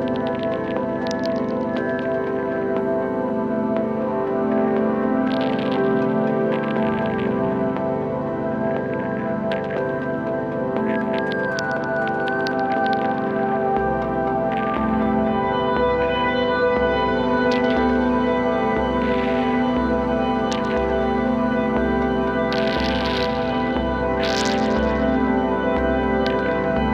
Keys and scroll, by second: 6.8 super+z, 14.3 space, 17.2 super+z, 18.4 space.